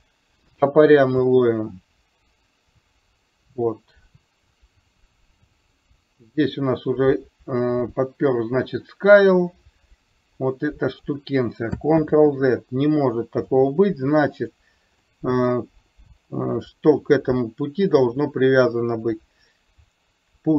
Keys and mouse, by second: 1.3 click, 2.7-11.1 drag, 12.1 ctrl+z, 14.4 click, 15.2 middle click.